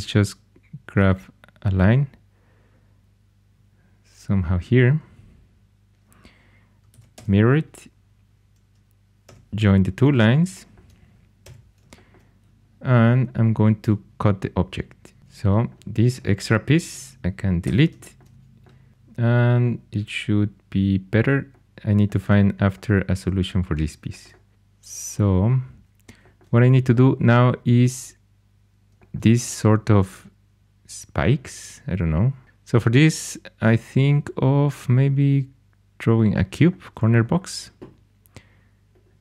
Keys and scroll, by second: 6.9 alt+x, 7.1 alt+x, 9.2 2, 11.4 j, 13.7 c, 15.2 4, 17.6 x.